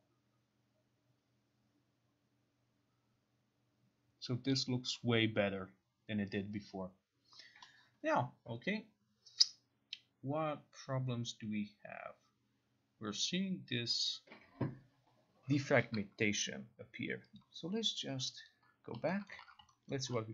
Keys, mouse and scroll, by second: 17.5 click, 18.6 click, 19.4 middle click, 19.5 ctrl+a, 20.0 alt+right click.